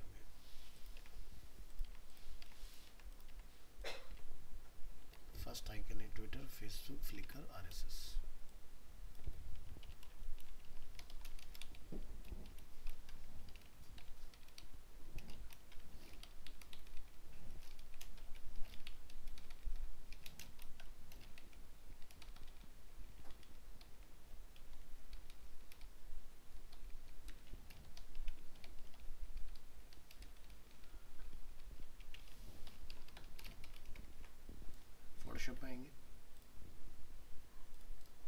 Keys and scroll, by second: 5.1 alt+Tab, 34.1 ctrl+s.